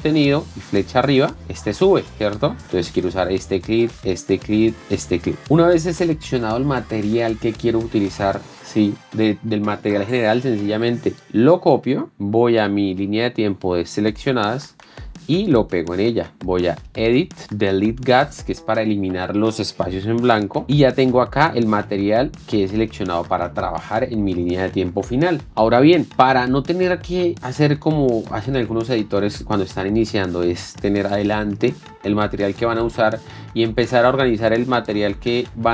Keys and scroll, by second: 1.4 alt+Up, 12.1 ctrl+c, 15.0 ctrl+v, 16.3 ctrl+v.